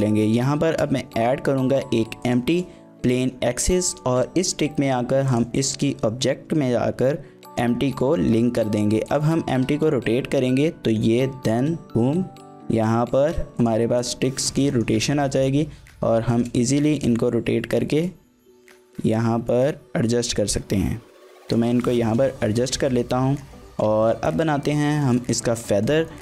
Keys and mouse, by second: 0.3 shift+middle click, 0.6 shift+a, 2.9 shift+middle click, 3.2 middle click, 8.4 shift+middle click, 9.4 r, 9.6 z, 13.6 shift+click, 14.5 shift+middle click, 14.7 middle click, 15.3 KP_1, 16.3 shift+middle click, 16.7 r, 18.5 z, 21.5 shift+click, 22.1 shift+middle click, 22.3-23.4 middle drag, 24.0 shift+middle click, 24.3 middle click, 25.0 shift+middle click, 25.3-25.6 middle drag, 25.8 shift+middle click, 26.1 middle click.